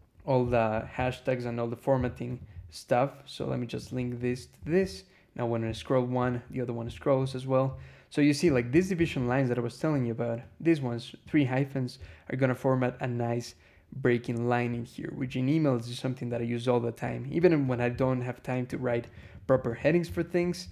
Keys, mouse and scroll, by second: 2.1 click, 3.6 click, 4.1 click, 4.7-5.6 scroll down 2, 7.2 scroll down 2, 9.1-9.4 scroll down 2, 10.3-11.3 drag, 14.6 scroll down 2, 15.2 scroll down 2, 15.7 scroll down 2, 16.5-17.2 scroll up 4, 17.5 click, 18.5 click, 20.0 scroll up 1, 20.6 scroll down 1.